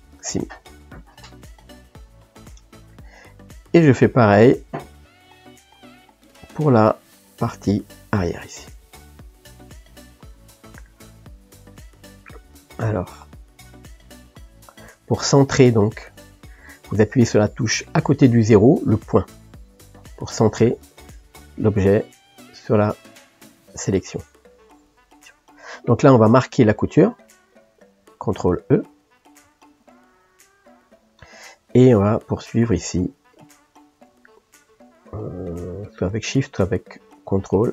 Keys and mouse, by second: 0.0 ctrl+e, 0.8-9.0 middle drag, 9.0 click, 10.5 KP_Decimal, 12.6 shift+., 14.1-20.3 ctrl+middle drag, 20.3 click, 21.0-29.4 middle drag, 29.7 ctrl+e, 31.7 click, 33.3 shift+click, 35.2 shift+click, 36.4 click.